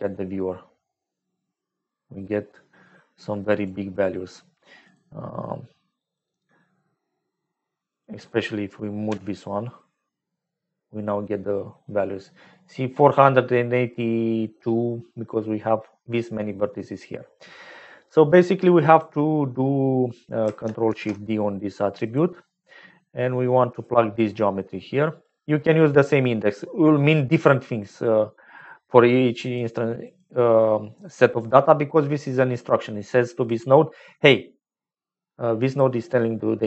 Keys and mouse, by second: 3.7 middle click, 7.8 click, 9.2 m, 11.2 click, 13.4 click, 17.2 click, 18.8 click, 20.8 ctrl+shift+d, 23.7-25.3 drag, 25.9 click, 29.1 click, 30.0 click, 30.5-32.6 drag, 33.4-35.8 drag, 36.1 click.